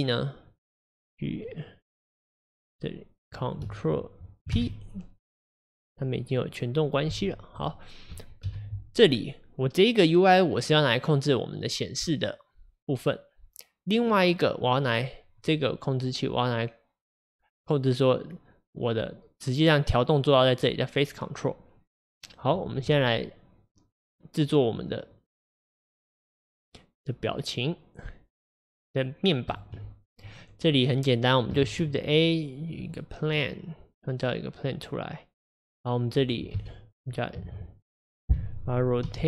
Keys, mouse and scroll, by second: 0.6 click, 1.5-2.7 middle drag, 2.7 click, 6.3 click, 7.1 g, 8.5 KP_1, 14.2 click, 16.0 click, 30.4 click, 32.9 shift+a, 33.4-36.6 middle drag, 36.6 KP_1, 39.1 r.